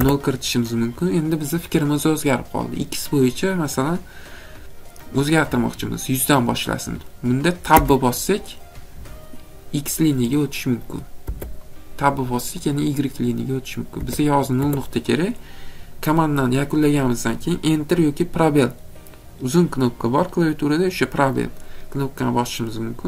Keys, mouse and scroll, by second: 0.0 0, 7.8 Tab, 11.2 Tab, 13.9 Tab, 14.6 Tab.